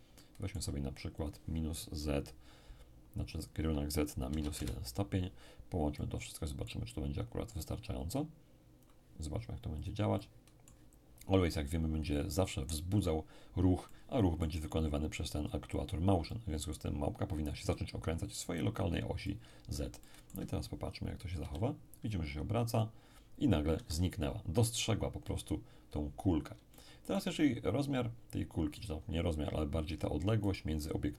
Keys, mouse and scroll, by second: 0.1-2.2 middle drag, 3.3 click, 4.3 -, 4.4 1, 4.5 Return, 5.7 scroll down 1, 5.9-9.8 middle drag, 7.6-9.8 drag, 10.1 click, 10.1-11.6 middle drag, 13.8-15.4 middle drag, 16.2-17.7 middle drag, 19.2-21.2 middle drag, 21.4 p, 23.7 Escape, 25.8-26.7 scroll up 1, 26.7-28.1 shift+middle drag, 30.4 right click.